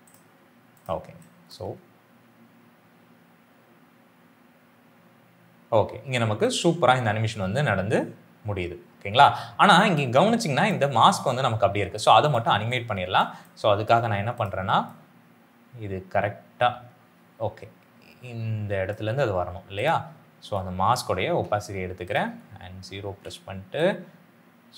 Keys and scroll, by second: 1.5 space, 5.6 space, 13.2 space, 21.2 t.